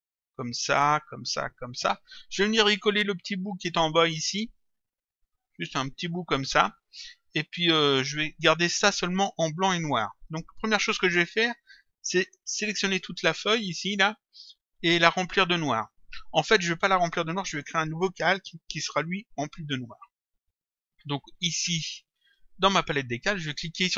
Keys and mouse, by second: 21.1 click.